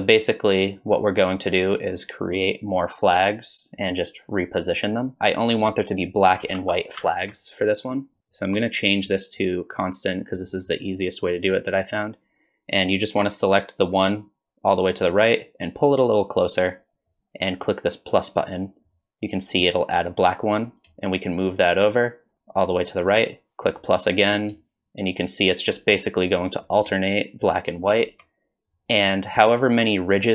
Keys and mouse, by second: 3.8-4.4 drag, 5.0 drag, 6.6 ctrl+z, 7.0 ctrl+z, 8.3-10.5 drag, 12.9-17.1 drag, 21.2-23.9 shift+drag, 24.9 shift+click, 27.2 shift+click, 28.8-29.1 drag, 29.5 shift+click.